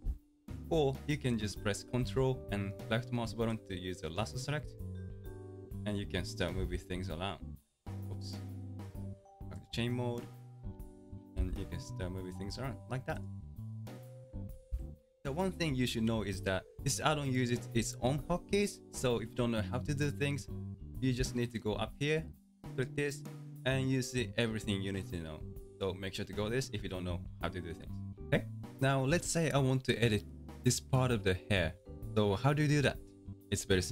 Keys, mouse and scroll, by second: 0.6 alt+a, 3.5 ctrl+click, 5.0-6.0 middle drag, 6.0-6.6 scroll down 1, 6.6 g, 8.8-10.8 drag, 10.8-11.4 scroll down 2, 11.4 g, 14.7 ctrl+z, 22.8-25.9 drag, 33.3-33.9 middle drag.